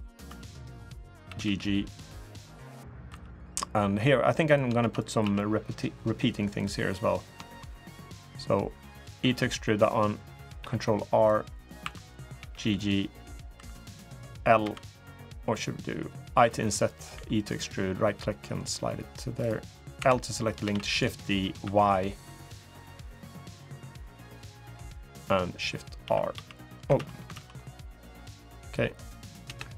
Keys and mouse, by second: 0.0 2, 1.0 g, 2.9 3, 3.2 click, 4.2 click, 4.6 shift+d, 5.0 s, 7.2 shift+click, 9.0 e, 10.3 ctrl+r, 11.6 2, 11.8 click, 12.1 g, 13.3 3, 14.4 l, 15.0 click, 16.1 i, 16.9 e, 18.0 click, 19.1 click, 19.7 l, 20.4 shift+d, 21.4 y, 24.0 click, 25.8 shift+r, 26.1 shift+r, 26.7 ctrl+z, 27.1 ctrl+z, 29.2 Return.